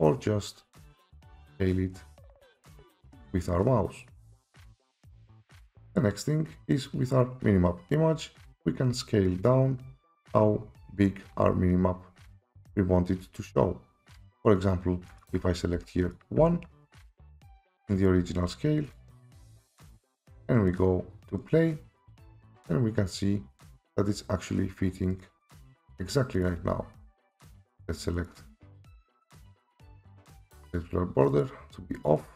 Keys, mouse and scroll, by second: 0.8 click, 1.2 click, 2.7 click, 5.0 click, 5.8 click, 9.3-11.4 scroll down 18, 11.4-11.7 scroll, 15.2 click, 15.7 1, 16.1 click, 16.4 1, 17.3 click, 19.0 click, 20.2 click, 20.8 click, 21.6 click, 25.2 right click, 26.4 click, 27.4-32.1 right click, 28.2 click, 29.2 click, 29.8 click, 30.7 click, 31.4 click.